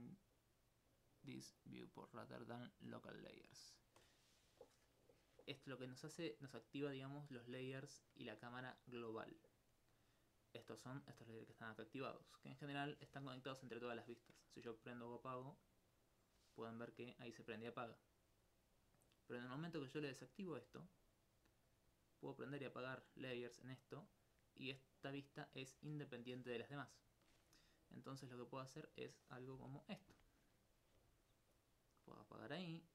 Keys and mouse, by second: 15.2 shift+click, 15.6 shift+click, 18.6 shift+click, 18.8 shift+click, 19.2 shift+click, 20.1 click, 21.3 shift+click, 21.7 shift+click, 21.9 shift+click, 22.1 shift+click, 22.4 shift+click, 23.5 shift+click, 24.2 shift+click, 24.7 shift+click, 28.5 click, 29.2 middle click.